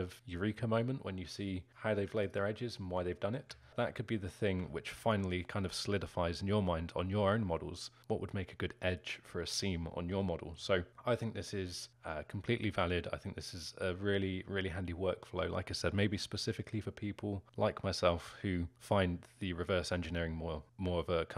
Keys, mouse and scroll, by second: 1.7 click, 2.3 alt+shift+click, 3.6-9.7 alt+middle drag, 9.7 scroll down 2, 10.2-21.3 alt+middle drag.